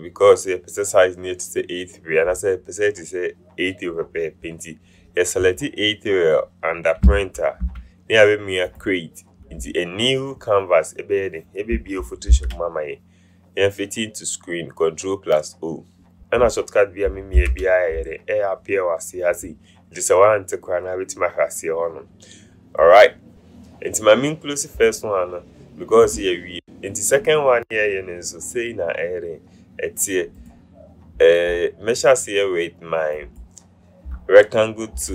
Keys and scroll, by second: 12.4 ctrl+0, 17.6 ctrl+0.